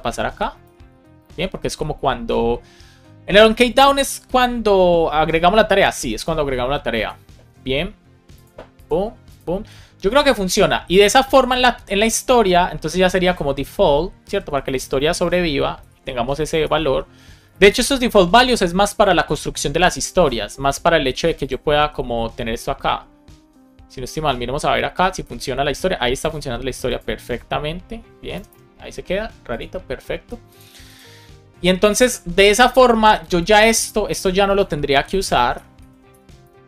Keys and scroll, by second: 0.2 Return, 0.6 super+v, 1.2 super+s, 14.1 Right, 16.1 Right, 16.6 BackSpace, 16.8 shift+i, 17.5 super+s, 21.7 super+r, 28.3 Return, 35.0 shift+super+Left, 35.5 BackSpace, 35.9 Down, 36.0 BackSpace.